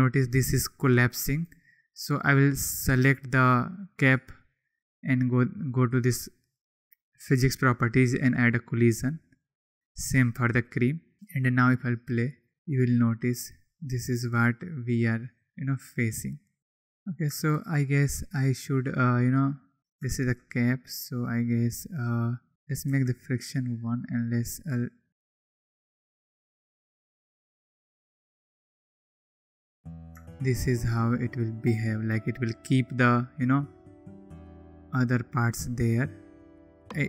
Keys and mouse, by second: 1.9 click, 10.6 click, 11.1-17.2 drag, 20.8 click, 22.6 click, 25.0 click, 32.5-33.4 drag, 34.2 click.